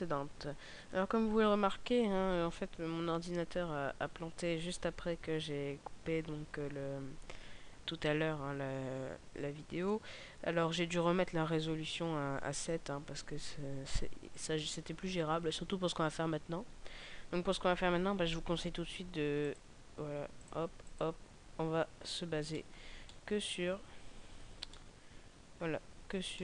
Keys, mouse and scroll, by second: 19.4 click, 22.5 middle click, 22.9 middle click, 23.8-24.5 scroll down 1, 24.6 ctrl+middle click, 24.8 ctrl+middle click, 26.3 shift+middle click.